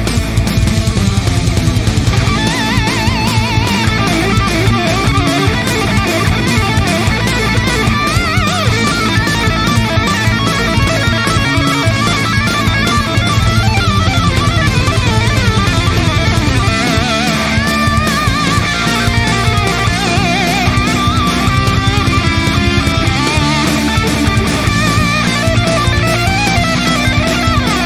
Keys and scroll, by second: 3.7 ctrl+t, 13.0 v, 18.3 ctrl+t.